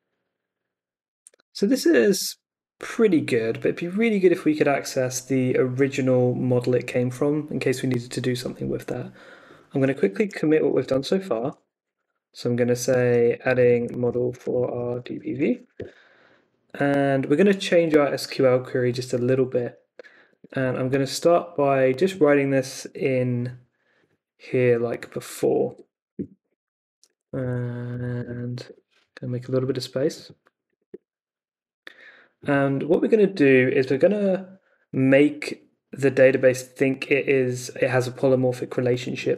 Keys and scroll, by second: 9.9-16.1 typing, 19.4 super+Tab, 25.6 BackSpace, 25.8 ,, 26.4 Return, 27.0 Left, 28.1 Return, 30.6 BackSpace, 30.9 Return, 32.8 Return.